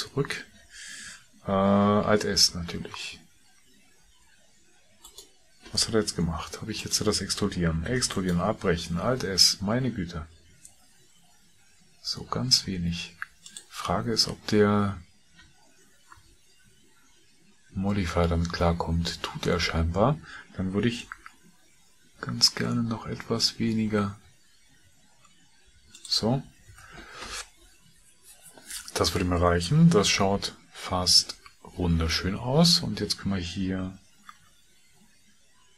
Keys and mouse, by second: 2.2 alt+s, 6.2 g, 8.8 g, 8.8 e, 9.1 alt+s, 16.3 Tab, 19.4 Tab, 21.0 alt+s, 26.7 Tab, 31.2 KP_1, 34.3 r.